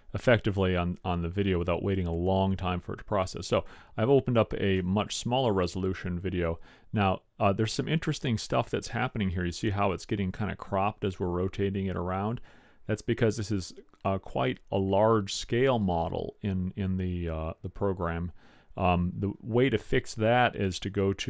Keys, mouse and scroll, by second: 1.2 middle click, 4.8-6.3 middle drag, 6.8-7.2 middle drag.